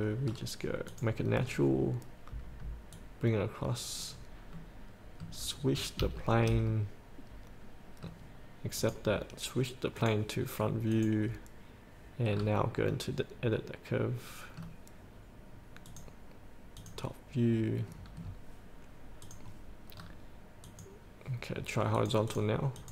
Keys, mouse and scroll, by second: 0.5-1.1 scroll up 1, 1.1 click, 1.6 scroll up 1, 3.1-4.8 drag, 4.8 middle click, 5.7-6.2 scroll up 1, 6.4-8.7 shift+middle drag, 9.0 click, 12.5-13.1 scroll down 2, 13.1-14.9 middle drag, 16.1 click, 18.0-19.4 scroll down 1, 19.4 click, 20.2 scroll down 1, 20.8-21.9 drag.